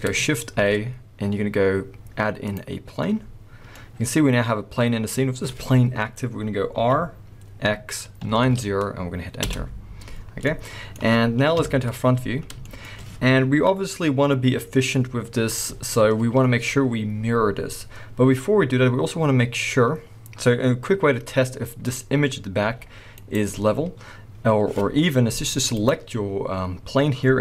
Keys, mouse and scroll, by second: 0.5 shift+a, 3.7-11.5 middle drag, 5.1-6.8 scroll up 2, 6.8 r, 11.5 KP_1, 12.3 scroll down 1, 12.4-21.8 shift+middle drag, 15.4-16.1 scroll up 2, 16.1-18.1 scroll up 1, 18.1-19.4 scroll up 1, 20.2-21.1 scroll down 2, 21.1-21.4 scroll down 1, 21.4-21.8 scroll up 2, 21.8 click, 22.2-22.5 scroll down 2, 22.5 g, 23.2 right click, 25.7 click, 26.8-27.4 scroll up 2.